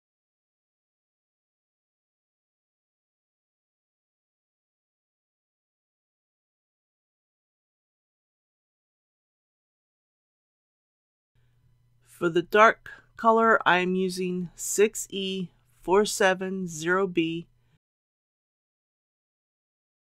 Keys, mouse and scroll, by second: 15.5 KP_6, 16.9 KP_4, 17.3 KP_7, 17.7 KP_0.